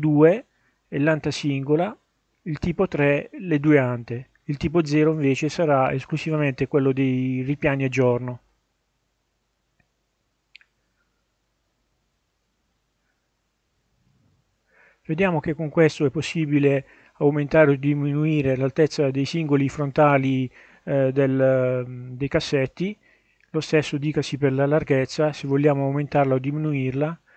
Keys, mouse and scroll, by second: 2.8-7.1 drag, 7.8-9.3 middle drag, 9.3 scroll up 1, 17.3-22.2 drag, 23.1-27.3 drag.